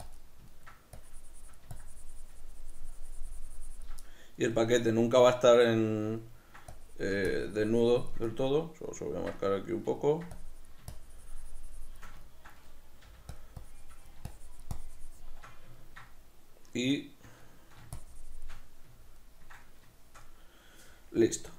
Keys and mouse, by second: 0.2 click, 0.2 middle click, 1.1-4.1 drag, 4.1-6.8 middle drag, 6.8-8.4 drag, 8.4-10.4 middle drag, 10.4-12.3 drag, 12.3-13.5 ctrl+middle drag, 13.1 f, 13.7-15.8 drag, 15.8-18.0 ctrl+middle drag, 18.0 shift+click, 18.7-21.5 middle drag.